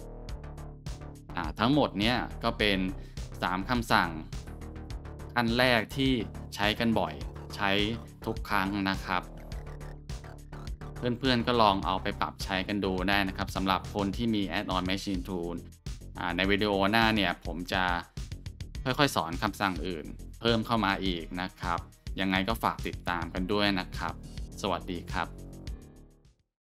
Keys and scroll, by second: 0.2 shift+scroll.